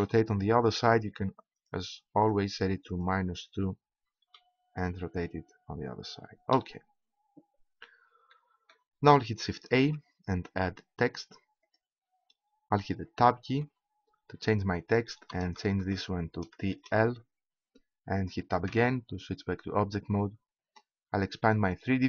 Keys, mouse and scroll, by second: 1.6-4.2 drag, 4.2 p, 6.5 p, 9.7 shift+a, 13.5 Tab, 15.3 BackSpace, 15.6 BackSpace, 16.2 BackSpace, 16.7 shift+l, 18.7 Tab.